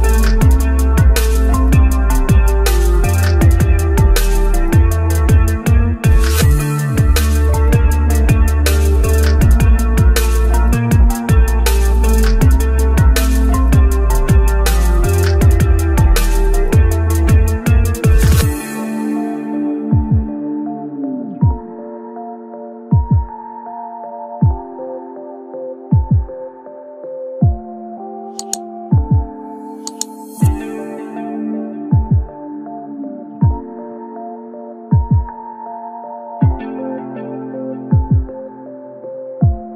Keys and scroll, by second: 19.6 ctrl+alt+shift+e, 22.7 Return.